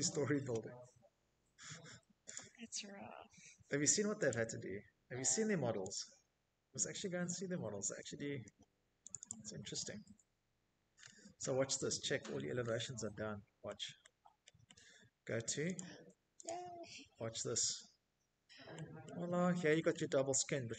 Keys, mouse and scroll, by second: 1.4 click, 3.0 click, 4.6 Escape, 4.9 Escape, 6.2 click, 6.4 click, 7.9 middle click, 8.1-8.6 middle click, 8.4 middle click, 9.6 middle click, 9.7 Escape, 9.7 middle click, 11.1 middle click, 11.7 middle click, 12.9 click, 13.2 scroll, 13.5 click, 14.4 Escape, 14.5-14.9 scroll, 16.1 middle click, 16.4-17.1 scroll, 18.0 scroll, 18.5 middle click, 18.6 Escape, 19.1 middle click, 19.2 middle click, 19.3 middle click, 20.1 middle click, 20.3 middle click, 20.5 middle click, 20.5 middle click, 20.6 middle click.